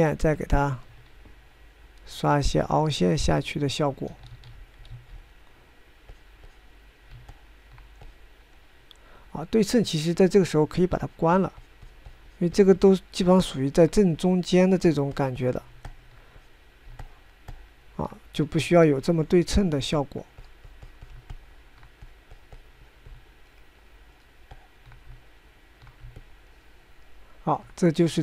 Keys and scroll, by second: 5.8 ctrl+z, 6.4 ctrl+z, 22.4 Escape.